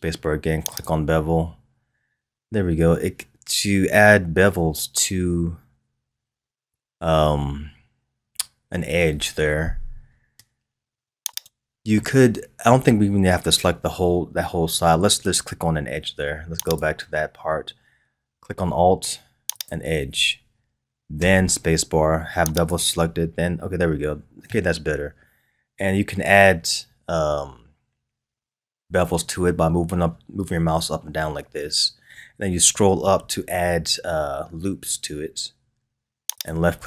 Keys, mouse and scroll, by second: 12.0-15.0 middle drag, 16.7 click, 19.5 alt+click, 21.2 space.